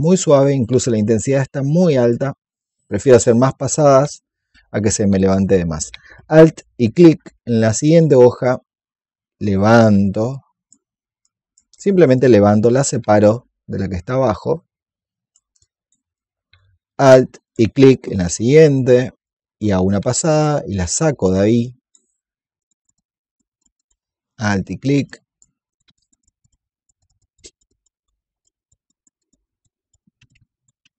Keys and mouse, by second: 3.3 alt+click, 6.7 alt+click, 7.5 alt+click, 8.0-15.3 drag, 15.5 alt+click, 16.0 click, 17.3 alt+click, 19.1-24.0 drag, 24.3 alt+click, 25.0 alt+click, 25.6 click, 27.9 alt+click, 28.4 alt+click, 30.0 click, 30.4 click.